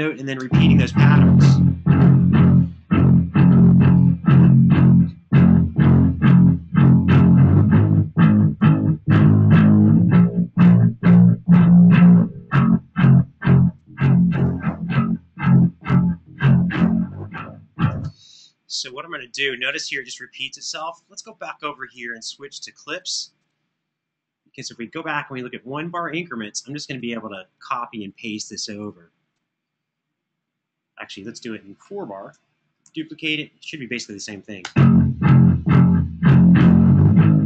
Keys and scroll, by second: 0.0 space, 19.7 space, 32.6 super+d, 34.3 space.